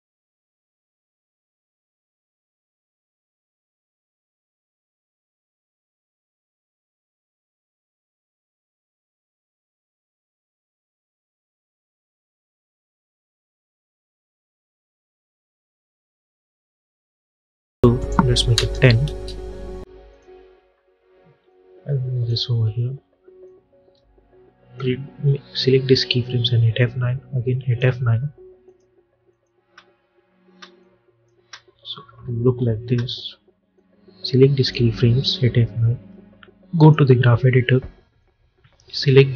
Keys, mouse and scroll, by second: 6.5 u, 7.3 click, 7.6 u, 8.4 scroll down 1, 9.5 click, 10.1 j, 11.0-15.0 drag, 16.0 Return, 17.9 click, 19.0 Return, 20.0-26.2 drag, 26.2 F9, 26.7 click, 27.8 F9, 28.5 click, 29.5 space, 30.7 click, 31.3 space, 33.6-35.3 drag, 35.3 F9, 36.6-39.3 drag.